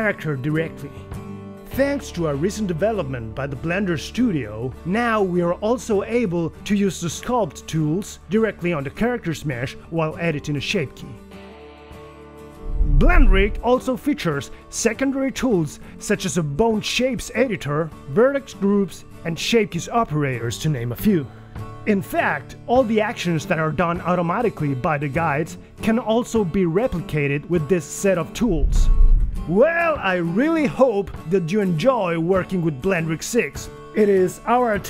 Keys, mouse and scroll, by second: 12.8 right click, 12.9-20.4 typing, 13.5 right click, 13.8 right click, 13.9 click, 14.1 right click, 14.4 alt+z, 14.5 click, 14.5 shift+middle click, 14.7 click, 14.8 click, 14.8 middle click, 15.4 click, 15.9 alt+z, 16.0 click, 16.1 middle click, 16.2 click, 16.3 click, 16.8 click, 16.9 middle click, 17.0 alt+z, 17.0 scroll down 2, 17.2 middle click, 17.3 scroll down 3, 17.3 click, 17.3 middle click, 17.5 click, 17.5 alt+z, 17.8 click, 17.9 middle click, 18.5 shift+middle click, 18.5 click, 18.5 middle click, 18.6 alt+z, 18.8 right click, 18.9 alt+z, 18.9 middle click, 19.1 click, 19.1 middle click, 19.3 alt+z, 19.3 middle click, 19.4 click, 19.5 alt+z, 19.7 click, 19.8 middle click, 19.8 scroll down 2, 20.1 click, 20.2 right click, 20.6 click, 20.6 middle click, 20.7 click, 20.8 middle click, 20.8 click, 21.0 scroll up 2, 21.0 alt+z, 21.0 right click, 21.1 click, 21.1 right click, 21.4 right click, 21.4 click, 21.6 click, 29.3 r, 29.4 g, 30.4 s, 32.1 r, 32.9 g.